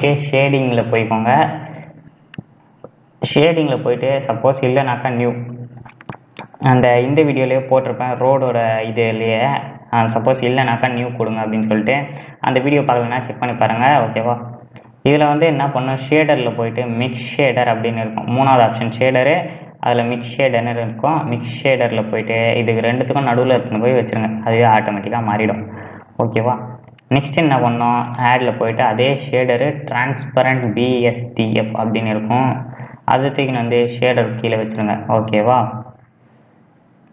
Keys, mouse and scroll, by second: 5.2-23.1 drag, 34.7-37.1 drag.